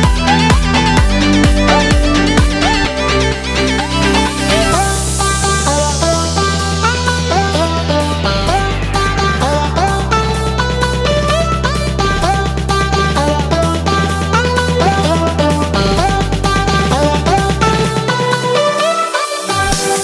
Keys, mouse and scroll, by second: 0.3 ctrl+F2, 13.7 drag, 16.2 shift+d, 16.6 x, 18.2 click, 18.3 ctrl+z, 19.0 ctrl+F2.